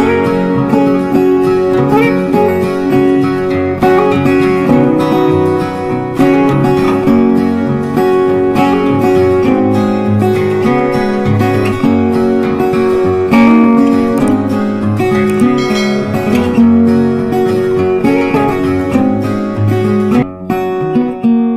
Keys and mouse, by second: 0.4 click, 1.2 ctrl+a, 1.9 o, 5.8-9.4 drag, 9.4-13.4 drag, 13.4 Right, 14.5 click, 17.3-19.5 typing, 19.9 ctrl+a.